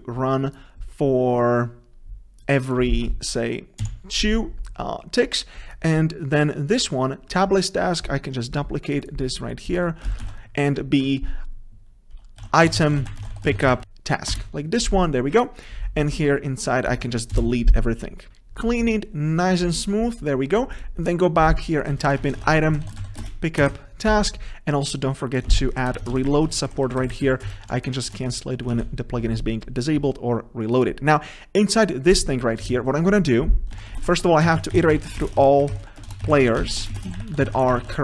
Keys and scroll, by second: 10.3 ctrl+c, 10.5 ctrl+v, 13.8 ctrl+a, 18.3 Escape, 22.1 ctrl+shift+Right, 23.4 ctrl+space, 23.8 Return, 25.6 ctrl+c, 26.3 ctrl+v, 28.9 ctrl+s, 36.2 ctrl+BackSpace.